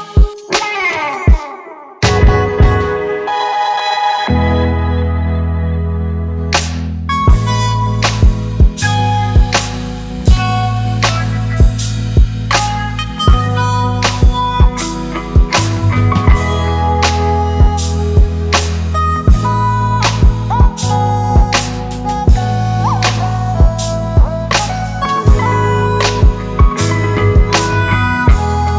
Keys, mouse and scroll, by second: 0.5 ctrl+t, 3.2 alt+shift+click, 5.7 alt+shift+click, 9.3 Return.